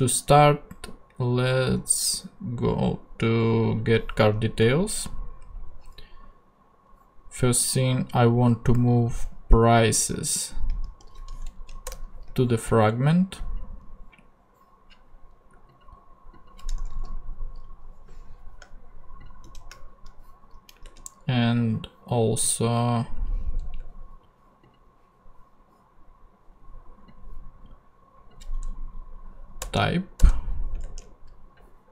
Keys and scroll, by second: 10.8 super+x, 11.5 super+Left, 11.8 super+BackSpace, 16.8 Return, 19.4 shift+Tab, 20.8 ctrl+Tab, 23.7 BackSpace, 29.6 BackSpace, 30.7 ctrl+BackSpace, 30.8 ctrl+Tab.